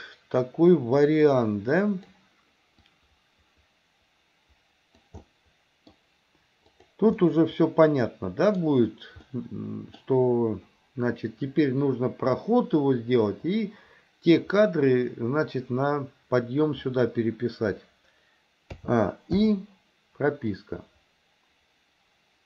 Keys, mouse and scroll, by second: 1.1-2.2 drag, 2.9-5.1 drag, 5.2-6.0 middle drag, 6.0 scroll down 1, 6.7 click, 7.3-8.6 middle drag, 9.3 middle click, 18.8 a, 19.4 i, 20.6-22.4 drag.